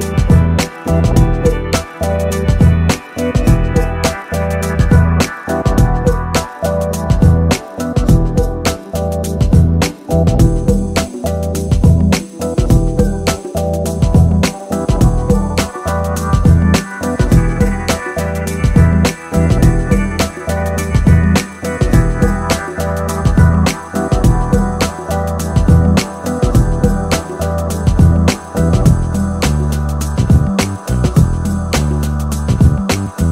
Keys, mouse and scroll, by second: 0.5 middle click, 2.4 KP_7, 3.9 shift+a, 7.2-8.5 middle drag, 8.5 KP_3, 9.4 click, 10.6 r, 13.5 click, 14.2-15.4 middle drag, 15.5 s, 17.7 KP_4, 18.2 KP_7, 21.2 r, 22.4-25.2 drag, 25.5-26.5 drag, 26.5 KP_0, 29.5 middle click.